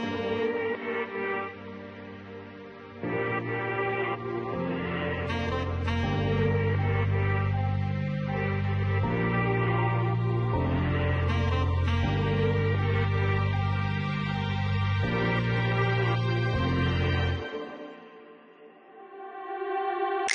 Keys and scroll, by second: 6.9 5, 7.3 7, 8.3 9, 11.6 5, 12.4 0, 12.9 5.